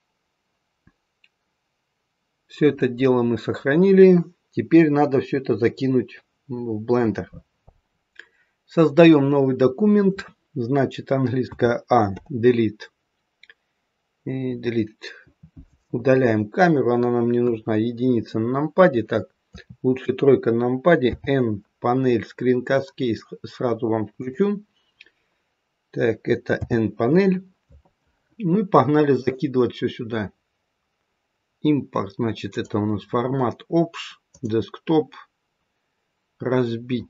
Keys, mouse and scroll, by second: 26.4 n, 29.0 click.